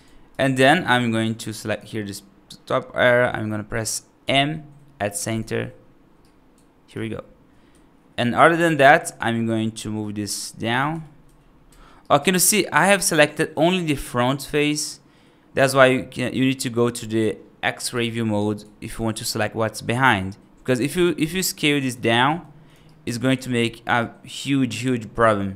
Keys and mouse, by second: 0.4 right click, 1.4 3, 1.6 click, 4.1 m, 6.1 right click, 7.6 1, 9.0-10.3 drag, 10.8 g, 11.9-15.4 right drag, 17.8 alt+z, 18.2 alt+right click, 19.0-20.6 right drag, 20.8 right click, 21.3 right click, 21.7 right click, 22.1 g, 22.7 right click, 23.3 alt+z, 23.9-25.5 right drag.